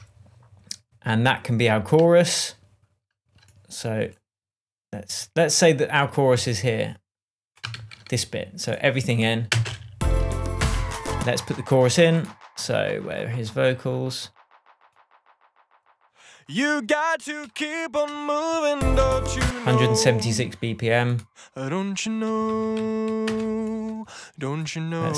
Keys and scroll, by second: 0.1 super+d, 8.1 super+d, 9.9 space, 11.1 space, 18.7 space, 22.4-23.7 typing.